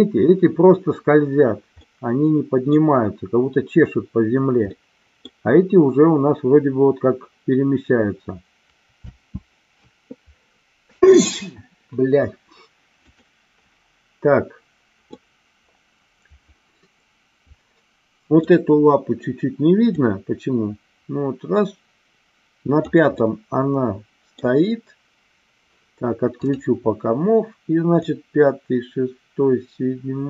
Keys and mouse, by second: 1.8 middle click, 4.7 middle click, 9.1 space, 13.1 click, 15.2-18.6 middle drag, 19.9-22.9 drag, 23.2-24.4 middle drag, 26.4 click, 28.0-30.2 drag.